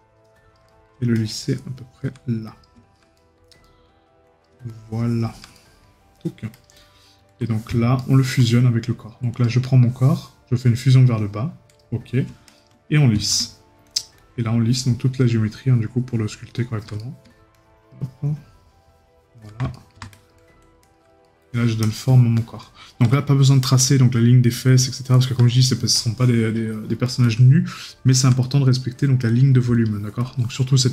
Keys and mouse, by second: 0.7 right click, 3.2 right click, 5.6 right click, 8.0 right click, 17.0 right click, 19.7 right click, 21.2 right click, 23.1 right click, 28.4 right click.